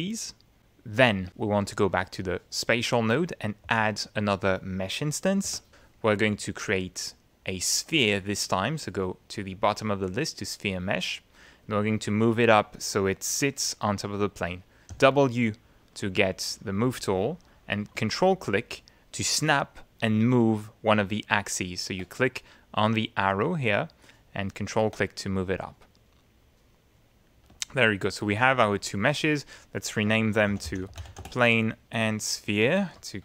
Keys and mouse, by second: 2.5 click, 3.6 ctrl+a, 5.5 Return, 7.0 click, 9.8 click, 11.5 middle click, 14.9 w, 17.5-21.8 drag, 23.3-25.0 ctrl+drag, 25.6-27.4 middle drag, 27.6 ctrl+click, 28.0 ctrl+middle click, 29.1 click, 30.2-31.6 typing, 32.3 click.